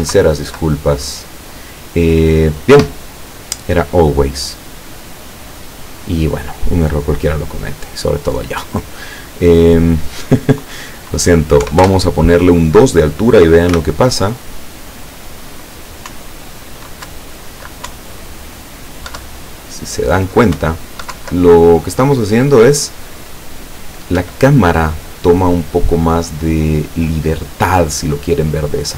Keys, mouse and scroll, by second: 0.2 Down, 2.8 Escape, 5.6-6.6 drag, 9.1 click, 11.7 KP_2, 11.9 KP_Enter, 13.8 p, 16.1 Up, 17.1 Down, 17.9 Up, 19.2 Down, 20.7 Up, 21.2 Down, 24.2 Escape.